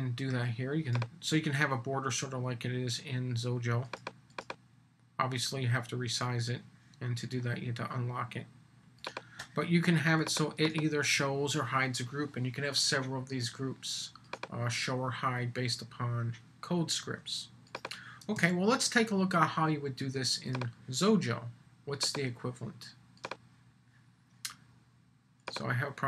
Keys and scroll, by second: 18.3 super+s.